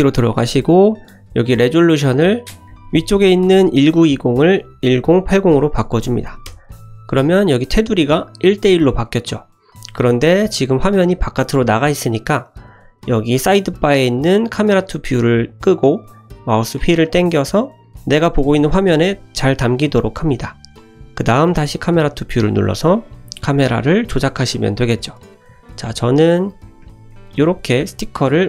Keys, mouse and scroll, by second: 4.3-7.0 drag, 14.8 click, 16.2-16.6 scroll down 1, 17.0-17.8 scroll down 1, 22.0 click, 22.8-23.3 scroll up 1, 23.8 shift+middle drag, 23.8 scroll up 2, 24.1-25.0 middle drag, 25.4 scroll up 1, 25.6 shift+middle click, 26.2 scroll down 1, 26.6 shift+middle click, 27.1-27.6 ctrl+middle drag, 27.8 shift+middle click.